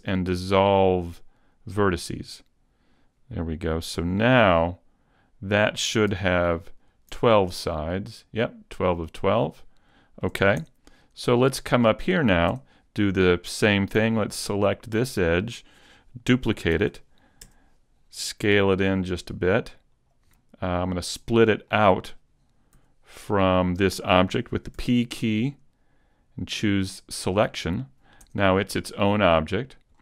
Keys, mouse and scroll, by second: 1.8 x, 3.9 z, 4.6 middle click, 6.8 middle click, 6.8 alt+right click, 9.9 shift+middle click, 10.6 Tab, 10.6 shift+middle click, 10.9 middle click, 11.9 right click, 12.5 Tab, 14.1 alt+right click, 14.6 middle click, 16.7 shift+d, 18.5 s, 20.1 click, 20.3 middle click, 21.3-21.7 scroll up 2, 21.7 shift+middle click, 22.7 s, 22.8-23.7 scroll up 1, 23.7 click, 24.7 p, 27.3 p, 28.3 Tab, 28.6 middle click, 29.5 right click, 29.9-30.0 scroll down 3.